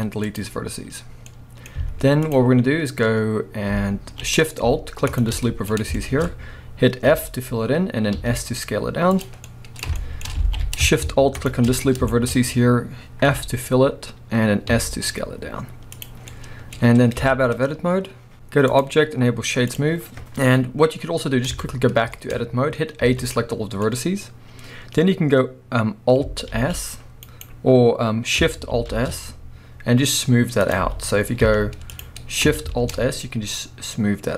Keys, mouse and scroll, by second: 1.3-5.1 middle drag, 1.8 z, 2.5-5.1 scroll up 1, 5.1 alt+shift+click, 5.4-9.2 middle drag, 5.9-7.1 shift+scroll up 2, 7.1 f, 9.2 click, 9.4 scroll down 1, 9.4-11.3 middle drag, 10.4 alt+a, 11.3 alt+shift+click, 12.1-13.3 shift+scroll up 2, 12.4-16.0 middle drag, 13.3 f, 16.0 click, 16.2 scroll down 1, 16.3-18.7 middle drag, 17.2 Tab, 18.7-21.5 drag, 21.5 Tab, 22.1-24.0 shift+middle drag, 23.0 a, 23.9 scroll up 1, 26.5 alt+s, 27.4 right click, 28.9 alt+shift+s, 30.8 z, 32.7 alt+shift+s.